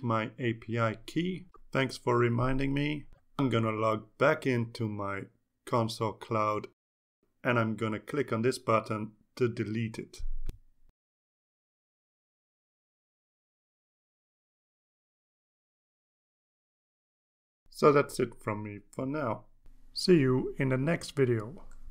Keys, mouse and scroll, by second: 11.6 click, 13.5 click.